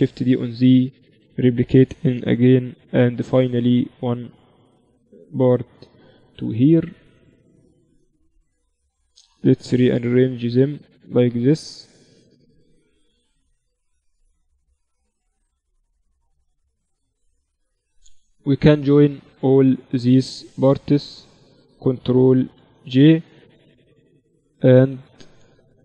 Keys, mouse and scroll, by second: 2.2 shift+d, 3.8 z, 4.6 z, 6.2-8.0 drag, 8.7-10.6 right drag, 9.5 shift+d, 10.8 z, 11.5 middle click, 11.5 z, 12.4 z, 15.7-18.6 middle drag, 18.2 click, 18.6-22.3 right drag, 22.3 ctrl+j, 24.7 z, 25.2 z.